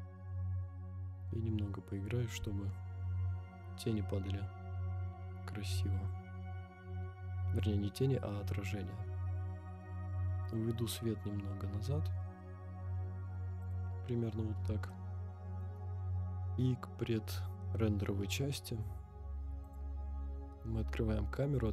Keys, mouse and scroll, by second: 13.7 click, 14.1-14.9 scroll up 3, 14.9-15.6 shift+middle drag, 16.9 scroll down 1, 17.6 scroll up 1, 18.4-19.6 scroll down 1, 19.6 click.